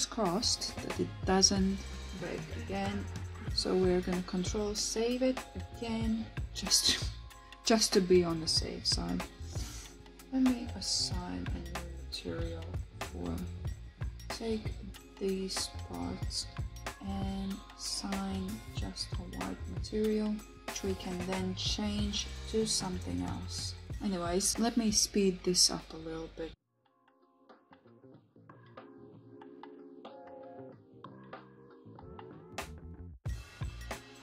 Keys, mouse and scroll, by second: 10.0 Tab, 10.9 KP_1, 12.1 alt+z, 13.5 shift+middle click, 15.5-16.9 drag, 20.2 click, 22.0 click, 23.5 Tab, 24.2 click, 26.5 click, 27.3-27.6 shift+middle drag, 27.9 shift+middle drag, 29.2 ctrl+s.